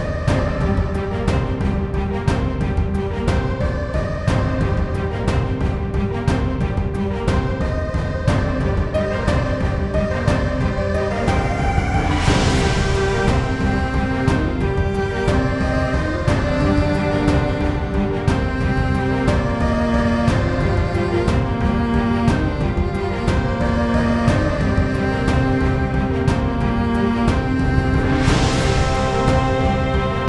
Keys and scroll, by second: 0.5 ctrl+v, 14.2-18.2 typing, 23.8-26.0 typing.